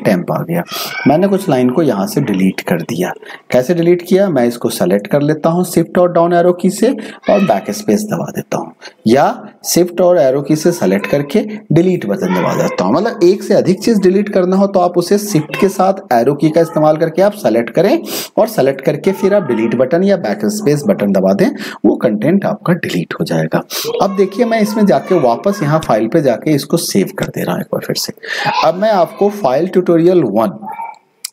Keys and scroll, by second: 3.8 shift+Down, 8.9 shift+Right, 10.1 shift+Right, 16.1 shift+Right.